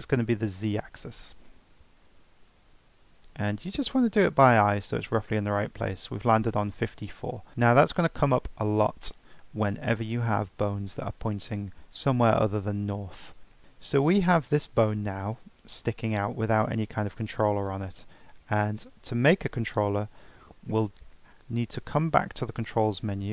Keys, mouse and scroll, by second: 0.7-3.8 drag, 7.5-8.4 shift+middle drag, 8.4 scroll down 1, 9.1-9.5 shift+middle drag, 9.5-12.2 scroll up 2, 13.3-13.6 scroll down 4, 13.6 click, 14.3 click, 19.7 click, 21.5 Tab, 22.7 scroll down 3, 23.0-23.3 scroll up 8.